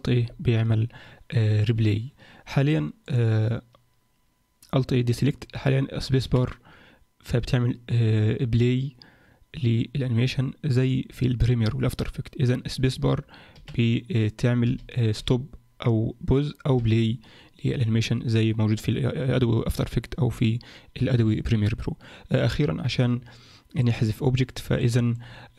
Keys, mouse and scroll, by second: 3.0 click, 6.2 space, 13.5 space, 14.6 space, 15.2 space, 16.8 space, 23.0 Escape, 23.8 click, 24.8 shift+middle click.